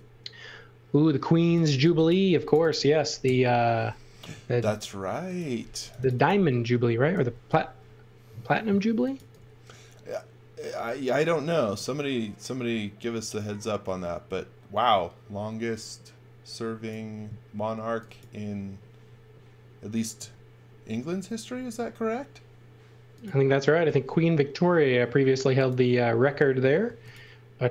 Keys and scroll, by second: 1.4 x, 1.7 v, 2.3 space, 3.2 Delete, 7.3 g, 8.7-9.7 typing, 17.8 x, 21.6 m, 26.6 z, 26.8 space.